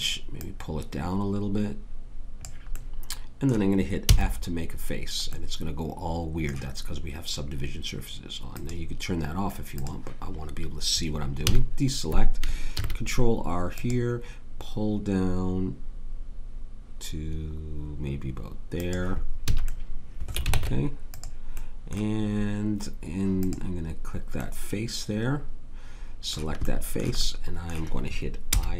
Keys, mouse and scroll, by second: 4.0 f, 11.4 a, 12.7 ctrl+r, 19.5 a, 20.5 ctrl+Tab, 24.8 click, 28.5 i.